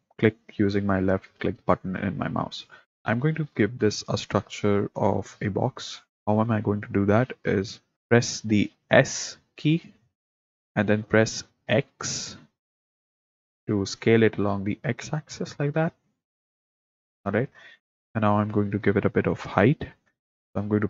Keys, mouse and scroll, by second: 9.8 s.